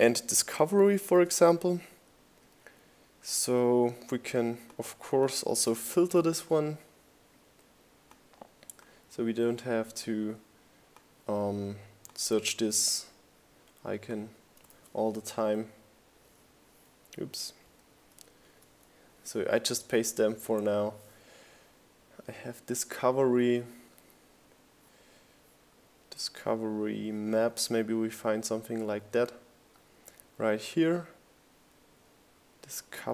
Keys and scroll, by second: 1.3-2.2 typing, 10.2 super+c, 13.6 super+v.